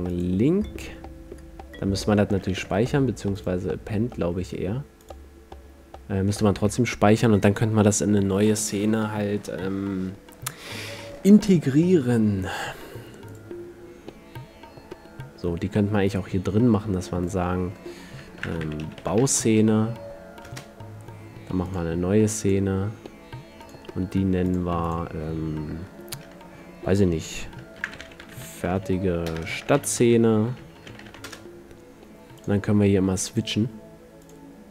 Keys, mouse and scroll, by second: 2.8 Escape, 3.5-5.2 drag, 6.7 Escape, 13.5-15.4 drag, 17.4-19.3 drag, 21.8-22.7 drag, 33.6 click.